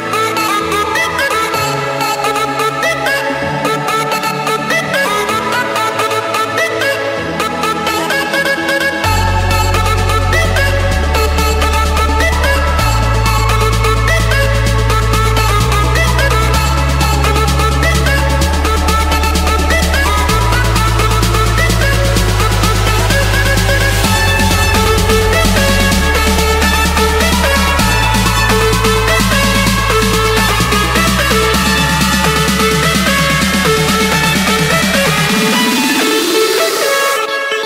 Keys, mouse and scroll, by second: 0.8 click, 1.4 Escape, 2.5 click, 4.8-6.0 scroll, 7.3 Escape, 8.6-10.7 typing, 9.7 Return, 11.2 Escape, 11.4 Escape, 12.5 click, 14.1 click, 14.4-14.7 scroll, 15.6 click, 16.6 click, 17.7-18.8 middle drag, 18.0 Escape, 19.3 Return, 21.9-23.0 drag, 23.6-24.8 drag, 26.6 F8, 30.3 shift+,, 33.7 shift+,, 35.4 typing, 36.3 Return.